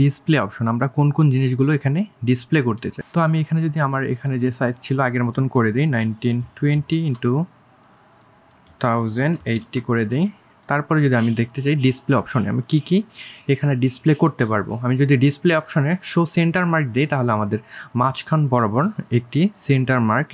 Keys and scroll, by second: 3.1 KP_1, 3.6 KP_9, 3.9 KP_2, 5.9 KP_1, 6.3 KP_0, 6.6 KP_8, 16.5 1, 18.2 3.